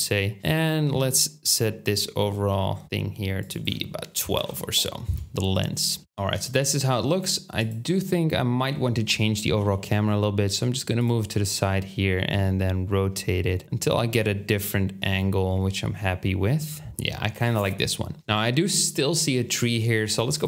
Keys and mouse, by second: 0.4-2.3 middle drag, 4.9-7.7 drag, 4.9-6.0 middle drag, 4.9-6.0 right drag, 6.0 Tab, 7.1 middle click, 7.1-10.0 right drag, 9.6 g, 10.0-18.8 drag, 11.4 r.